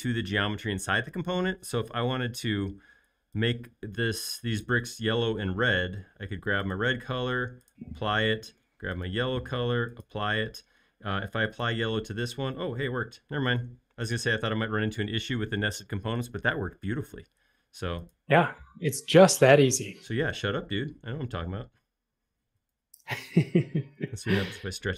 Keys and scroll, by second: 14.8 space.